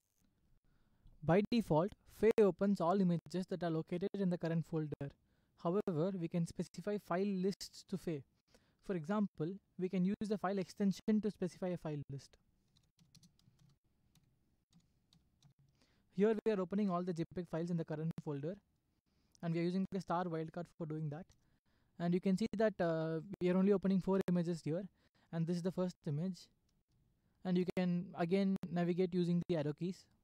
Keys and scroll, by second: 12.5-15.9 typing, 21.3 Return, 26.7 Right, 27.6 Right.